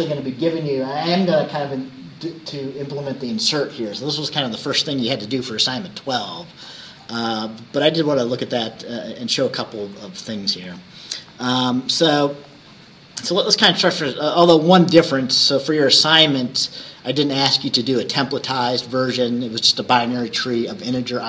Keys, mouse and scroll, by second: 6.7-7.0 scroll down 2, 7.5 scroll down 2, 8.4-8.8 scroll down 2, 9.0-9.8 scroll down 4, 10.0-10.7 scroll up 2, 11.6 scroll up 2, 12.5 click, 13.2-13.6 scroll down 2, 13.8 scroll up 2, 15.3 click, 16.3 scroll down 2.